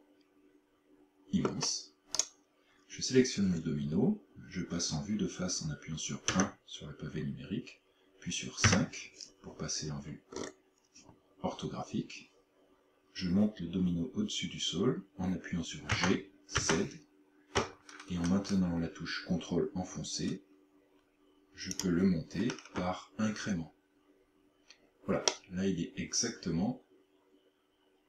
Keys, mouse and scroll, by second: 2.2 right click, 6.3 KP_1, 8.7 KP_5, 10.0-10.6 scroll up 9, 16.0 g, 21.8 ctrl+click, 25.3 middle click.